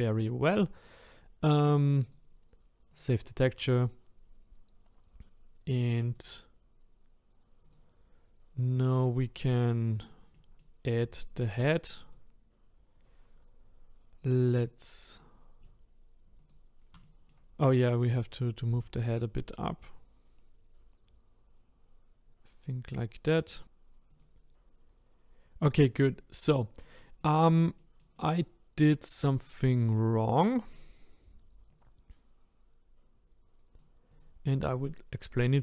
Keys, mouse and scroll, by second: 3.0 click, 3.6-7.7 middle drag, 7.7 click, 8.6 middle click, 9.2-9.6 scroll down 5, 9.6-11.1 shift+middle drag, 11.1 click, 12.1 click, 14.5 click, 15.5-16.5 middle drag, 16.5 click, 17.0 shift+middle click, 17.9 click, 18.6-19.9 scroll up 5, 19.9 click, 23.1-23.6 scroll down 3, 23.6 click, 24.2 click, 25.2-25.6 scroll down 2, 25.6-29.3 middle drag, 29.3 click, 29.8-30.8 scroll up 3, 30.8 click, 31.9 click, 34.2 click, 34.5 middle click, 35.1-35.4 scroll down 1, 35.4 middle click.